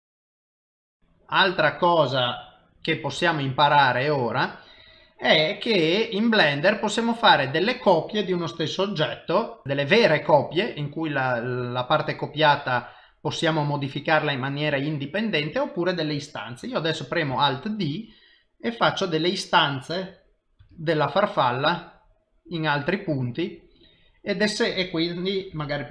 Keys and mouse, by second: 3.4 n, 17.8 alt+d, 21.0 alt+d.